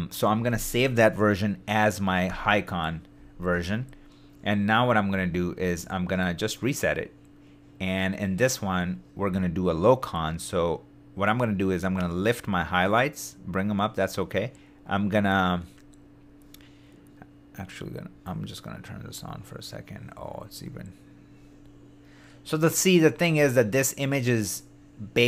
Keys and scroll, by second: 2.3 super+y.